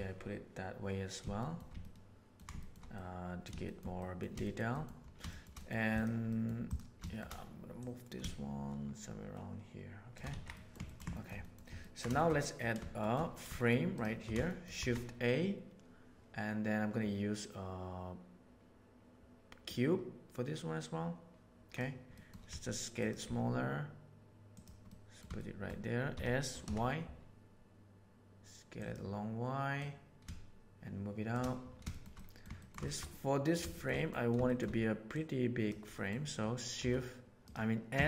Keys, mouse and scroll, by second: 1.4 shift+middle click, 1.8-2.3 ctrl+middle drag, 2.6 shift+middle click, 2.9-3.4 middle drag, 3.6 shift+middle click, 3.9 middle click, 4.4 shift+middle click, 4.7 middle click, 5.2 shift+middle click, 5.5 middle click, 5.8 right click, 6.2 middle drag, 7.0 shift+middle click, 7.7-9.6 right drag, 10.3 alt+a, 10.5 middle drag, 10.8 ctrl+middle drag, 11.1 shift+middle click, 11.4 middle click, 11.8 ctrl+middle click, 12.1 shift+middle click, 12.4 middle click, 13.0 shift+middle click, 13.9 shift+click, 14.4 shift+middle click, 14.7 shift+a, 22.2 middle click, 22.4 s, 23.3 s, 24.8-25.2 middle drag, 25.3-25.6 shift+middle drag, 26.1 s, 29.7 right click, 30.1-31.3 shift+middle drag, 31.8 shift+middle drag, 32.1-32.4 middle drag, 32.5 ctrl+middle drag, 32.8 shift+middle click, 33.0-33.5 middle drag, 33.7 shift+middle click, 33.9 middle click, 34.4 shift+middle click, 35.1 right click, 35.9 middle click, 36.8 s, 37.9 s.